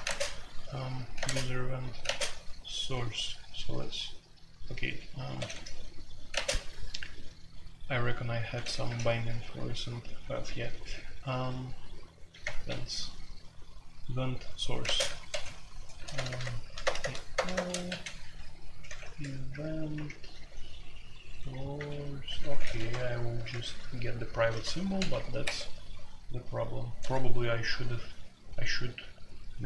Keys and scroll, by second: 0.0-2.5 typing, 5.3-6.3 typing, 8.6 typing, 12.4 Return, 14.8-25.9 typing.